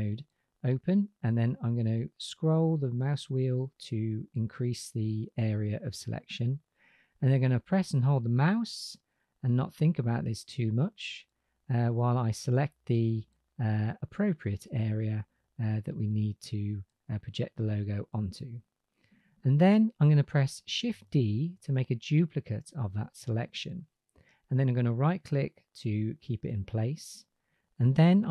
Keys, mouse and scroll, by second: 7.8 click, 15.8-16.3 right drag, 16.6 middle drag, 21.2 shift+d.